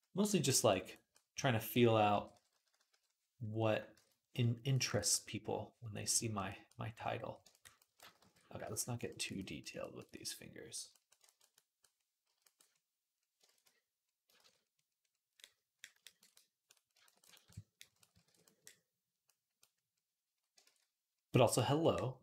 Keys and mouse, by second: 0.0 d, 1.4-2.7 typing, 3.8 ctrl+z, 7.9 ctrl+z, 8.1 ctrl+z, 8.5 ctrl+z, 12.1 typing, 13.3 ctrl+z, 14.2 ctrl+z, 18.1 alt+q, 18.4 click, 19.3-22.2 drag, 20.5 ctrl+z.